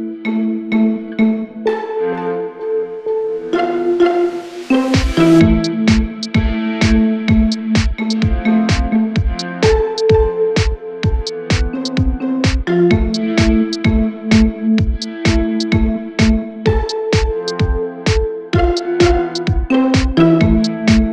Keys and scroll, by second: 1.8 Delete, 6.6 ctrl+t, 18.0 ctrl+t.